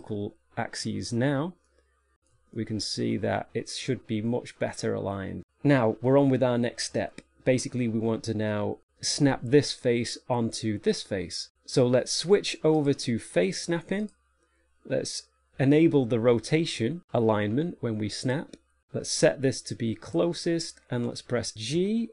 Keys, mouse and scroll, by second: 0.3 click, 2.0 shift+middle click, 4.4 middle click, 7.0 shift+middle click, 13.1 click, 18.5 click, 19.4 click, 22.0 g.